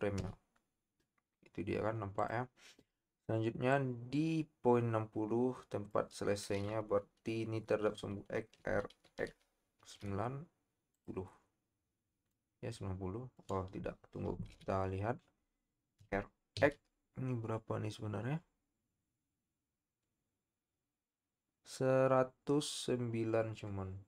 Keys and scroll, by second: 9.0 x, 9.8 9, 9.9 0, 14.7 KP_3, 16.0 r, 16.5 x.